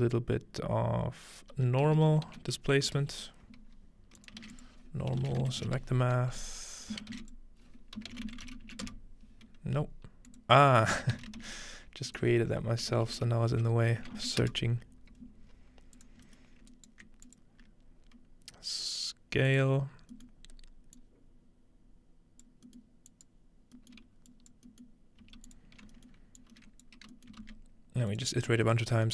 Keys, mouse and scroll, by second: 1.8-2.6 typing, 4.2 click, 4.4-6.1 shift+drag, 4.4-9.2 typing, 6.8-7.9 shift+drag, 8.0 click, 10.3 click, 11.2 typing, 12.1-13.8 shift+drag, 12.9-14.1 typing, 16.0-17.4 drag, 16.2-17.4 scroll up 1, 16.8-17.3 alt+right drag, 19.5 click, 20.4 scroll up 2, 21.0-22.5 drag, 23.1 click, 23.6 scroll down 2, 24.3-28.9 drag, 24.3-25.5 scroll down 1, 25.2 g, 25.8-27.4 scroll up 1, 27.4 typing, 28.3-29.1 shift+scroll down 1.